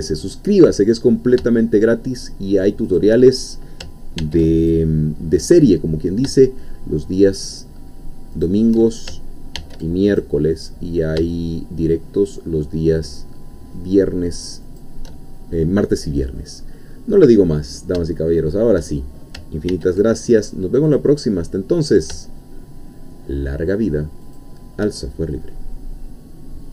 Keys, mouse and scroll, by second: 2.9 shift+click, 4.2 ctrl+r, 4.7 ctrl+click, 8.3 shift+click, 9.6 ctrl+r, 10.1 ctrl+click, 14.7 shift+click, 17.4-17.8 scroll down 2, 18.1 shift+middle click, 19.7 ctrl+r, 20.9 click, 24.2 shift+click.